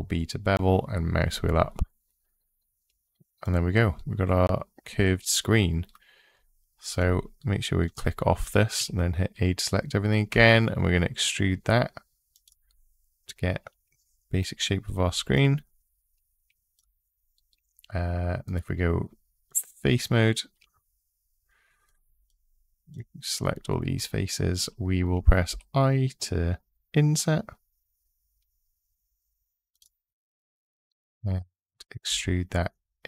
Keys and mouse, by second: 6.7 click, 8.6 a, 9.1 click, 10.1 e, 12.1 click, 18.3 click, 22.7 shift+click, 30.7 middle click, 31.8 e.